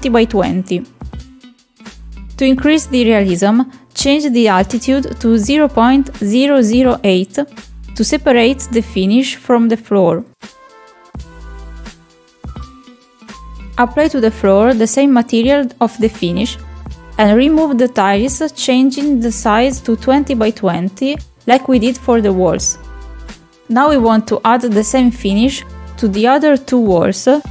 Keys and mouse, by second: 1.8-2.8 drag, 3.3 click, 5.7 middle click, 9.4-11.6 drag, 10.4 KP_0, 14.9 click, 19.0 click, 21.5 click, 22.6 click, 23.7 click.